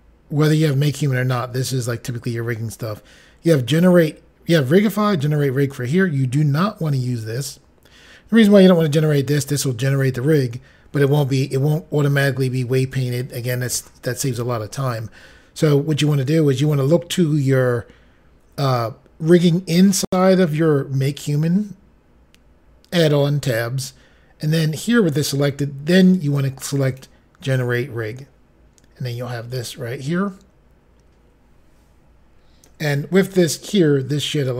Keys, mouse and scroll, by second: 26.8 click.